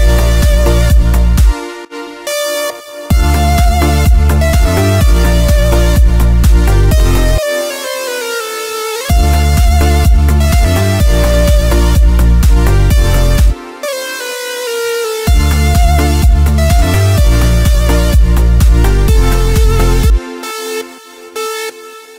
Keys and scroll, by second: 1.2 space, 3.0 space, 7.3 space, 8.9 space, 13.4 space, 15.1 space, 19.9 space.